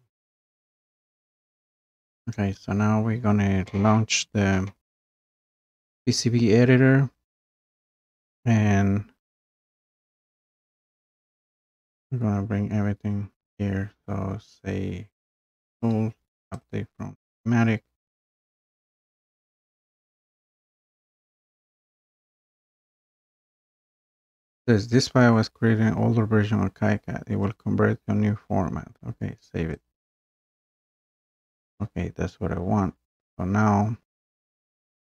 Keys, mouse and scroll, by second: 8.2-10.2 scroll down 2, 10.2-11.0 scroll down 1, 11.0-11.7 scroll up 1, 11.7-12.2 scroll down 1, 12.2-13.2 scroll up 1, 15.7 click, 16.7 click, 20.4 click, 20.9 click, 21.2-21.7 scroll down 4, 22.1-22.7 scroll, 22.7-23.2 scroll, 24.4 scroll, 30.2-35.0 drag.